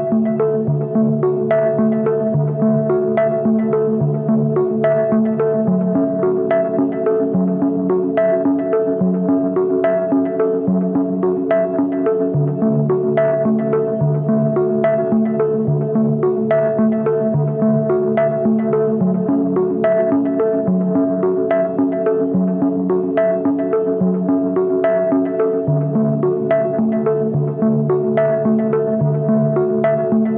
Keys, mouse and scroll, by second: 5.5-7.7 drag, 7.9 scroll down 2, 9.0-9.4 scroll down 2, 9.4-9.7 scroll up 2, 10.8 scroll up 1, 20.3 click, 21.0 click, 21.7-22.0 scroll up 2, 22.1 alt+click, 22.4 alt+middle click, 22.7 scroll down 2, 23.0 alt+click, 23.3 alt+middle click, 23.8-24.1 scroll down 2, 24.1 scroll up 1, 24.5-25.2 scroll down 4, 29.0-30.3 drag.